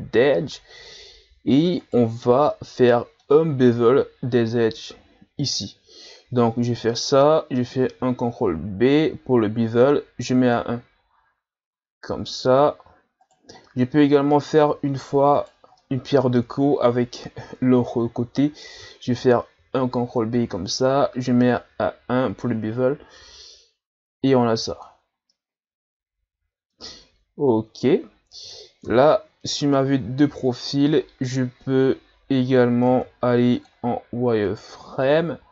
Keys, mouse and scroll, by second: 1.8 right click, 2.5-5.5 middle drag, 7.9 ctrl+b, 13.7-15.4 middle drag, 15.4 shift+right click, 15.8-18.8 middle drag, 19.6 ctrl+b, 25.3-28.9 middle drag, 28.9 KP_3, 29.7 scroll down 5, 32.9 ctrl+Tab, 34.5 right click, 35.1 z.